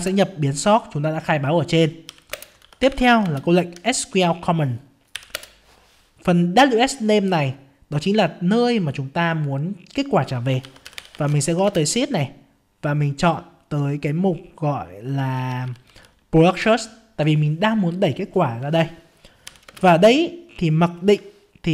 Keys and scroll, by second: 0.0 ctrl+space, 3.2 ctrl+space, 11.6 ctrl+space.